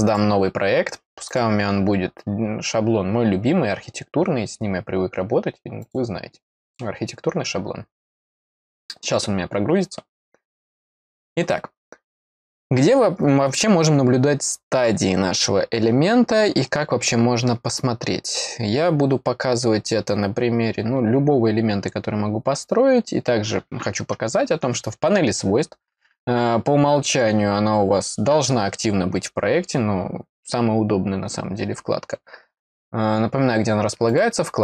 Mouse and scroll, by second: 0.0 click, 1.2 click, 5.8 click, 6.6 click, 34.0 click.